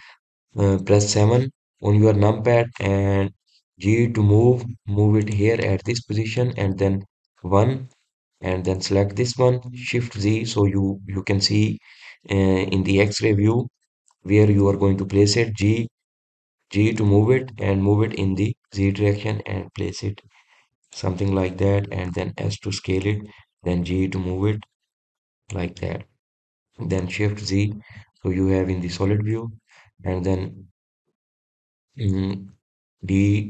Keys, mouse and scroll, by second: 0.1-1.1 middle drag, 1.1-2.7 scroll down 1, 2.7 KP_7, 5.4 g, 7.2-8.8 middle drag, 8.8 KP_1, 10.2 click, 11.7 shift+z, 27.0 drag, 27.4-28.9 middle drag, 28.9 shift+z, 29.7-30.2 scroll down 1, 30.2-31.2 middle drag, 31.2 drag.